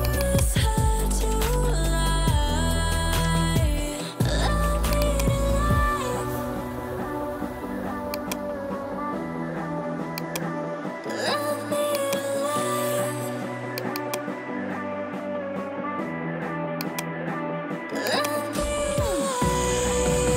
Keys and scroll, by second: 1.4-3.3 typing, 3.6 Return, 6.6 3, 6.9 Return, 13.2 ctrl+g, 15.2 o, 15.5 e, 15.7 Return.